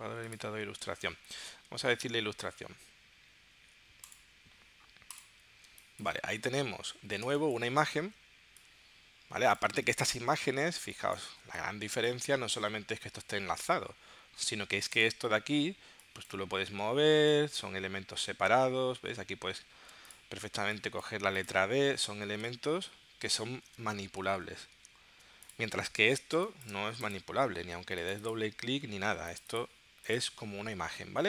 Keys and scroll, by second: 5.7 space, 7.3 space, 10.8 space, 19.8 super+z, 22.7 super+y, 23.6 super+y, 24.3 super+z, 26.4 space.